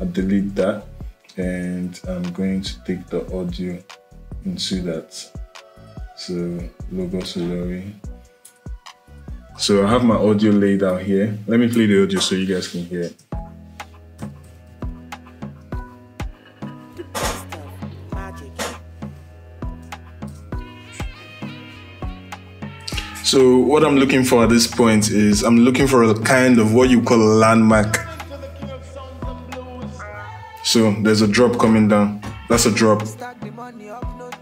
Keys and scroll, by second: 12.8 space, 13.9 =, 16.8 -, 20.1 0.